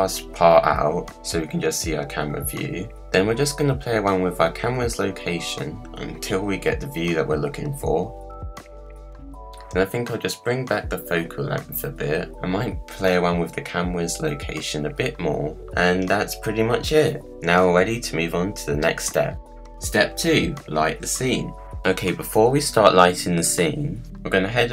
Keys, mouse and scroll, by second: 4.5-9.0 drag, 9.2-13.7 drag, 14.1-15.6 drag.